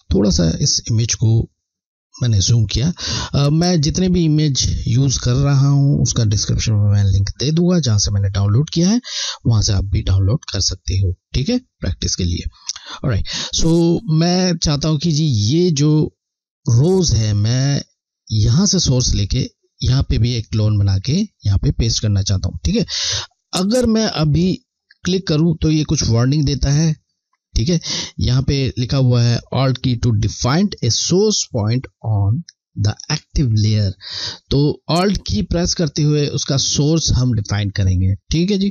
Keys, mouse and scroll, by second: 3.5-4.3 alt+scroll down 1, 10.1 alt+scroll down 1, 10.3 scroll, 10.9 alt+scroll down 1, 17.3 scroll, 24.7 click, 34.4 click.